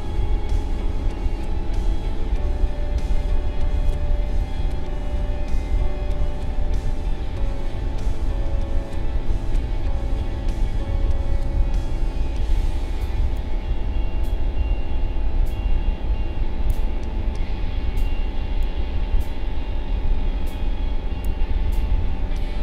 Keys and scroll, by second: 4.8 ctrl+].